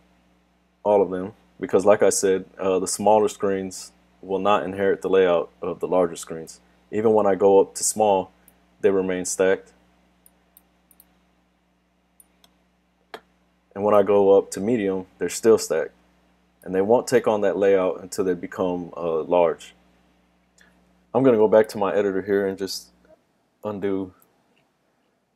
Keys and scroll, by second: 23.7 super+z.